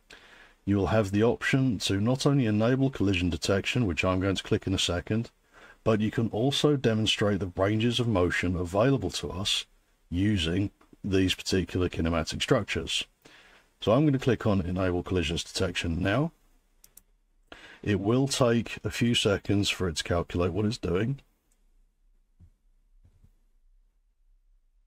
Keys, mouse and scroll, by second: 17.0 click, 22.0 click, 23.5 super+3.